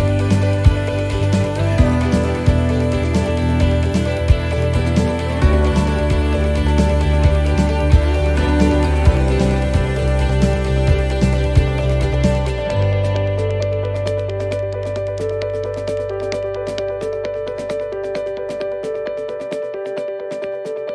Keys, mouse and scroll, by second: 4.7 right click, 5.8 click, 7.5 right click, 8.6 click, 10.4 right click, 11.4 scroll up 1, 12.5 right click, 13.5 click, 15.0 right click, 15.8 click, 17.0 middle click, 17.8 middle click, 18.5 shift+middle click, 18.6 shift+middle click, 19.4 scroll down 1, 19.8 middle click, 20.3 shift+middle click, 20.7 scroll up 1.